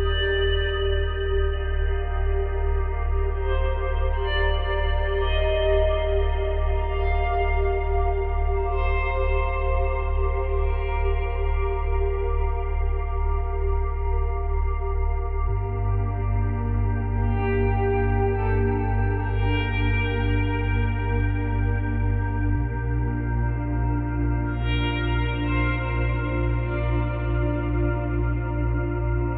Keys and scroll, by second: 4.3 space, 10.4 space, 12.3 space, 17.7 space, 21.7 space.